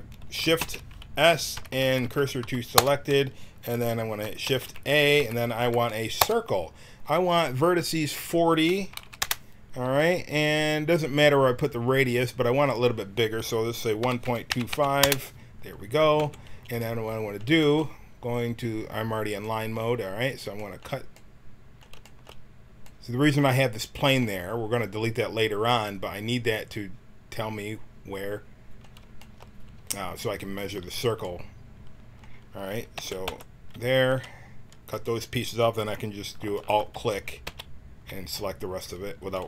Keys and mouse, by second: 0.5 shift+s, 1.7 Down, 4.4 shift+a, 7.8-10.0 drag, 12.6-14.6 right drag, 16.1 t, 16.7 middle click, 20.2 right click, 20.5-22.1 drag, 30.5-32.9 drag, 32.9 x, 36.5-38.4 drag, 37.4 x.